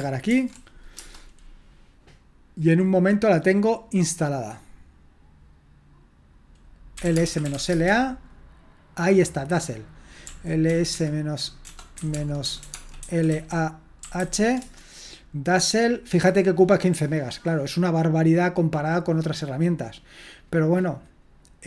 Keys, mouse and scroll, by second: 0.3 ctrl+alt+v, 1.0 Return, 6.8-8.0 typing, 10.2-14.7 typing.